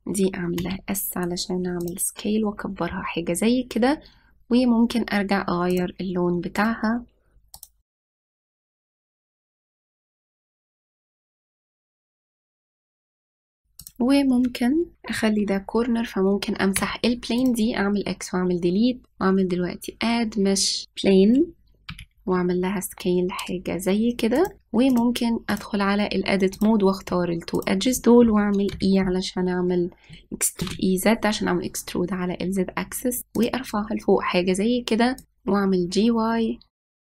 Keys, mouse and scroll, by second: 0.0 click, 1.5 s, 6.7 click, 7.6 drag, 9.9 g, 10.4 g, 11.2 click, 11.3 click, 11.4 s, 11.9 g, 12.8 click, 13.1 g, 13.7 click, 14.8 click, 17.7 x, 19.8-22.0 drag, 22.8 s, 25.9-27.6 drag, 28.5 shift+click, 29.7 e, 35.3 g, 36.9 click, 37.0 g.